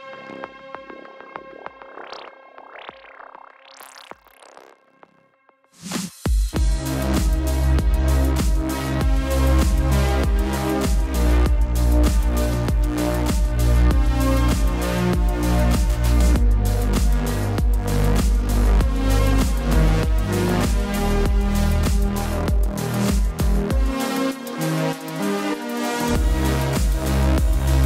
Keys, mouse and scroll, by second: 0.3 space, 0.4 click, 0.5 space, 0.7 click, 0.7 space, 2.4-3.4 typing, 3.6 click, 9.0 click, 20.0 click, 21.4-21.9 typing, 22.1 click.